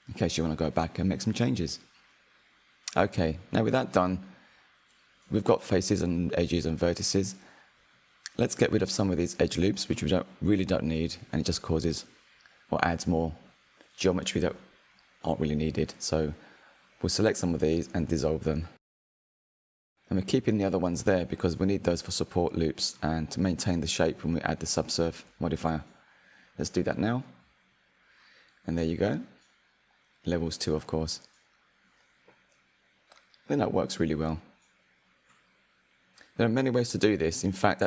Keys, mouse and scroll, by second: 0.3 click, 0.9 Tab, 1.4-3.1 middle drag, 3.1 click, 4.0 click, 4.3 click, 4.7 click, 5.1-7.1 middle drag, 7.1-8.2 scroll up 2, 8.2 click, 8.9-10.3 middle drag, 10.3 alt+click, 10.8 alt+shift+click, 11.2 alt+shift+click, 11.7 alt+shift+click, 12.4 alt+shift+click, 14.6 Delete, 17.3-19.3 shift+middle drag, 19.3 alt+click, 19.9 alt+shift+click, 20.3 alt+shift+click, 20.9 alt+shift+click, 23.8 Delete, 27.4 Tab, 29.2 click, 29.9 click, 31.3-33.0 drag, 33.0 click, 35.4-37.2 drag, 37.5 scroll down 3.